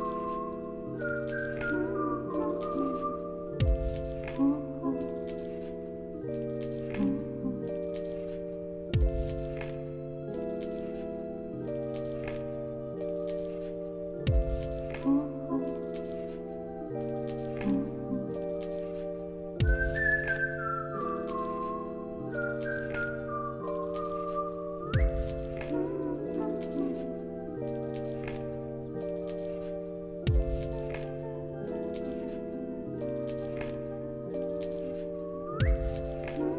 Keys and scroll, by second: 4.5 space, 10.4 ctrl+z, 12.3 2, 12.7 Return, 19.7 ctrl+z, 20.5-21.5 typing, 23.9 2, 24.0 Return, 32.4 ctrl+c, 33.7 ctrl+v.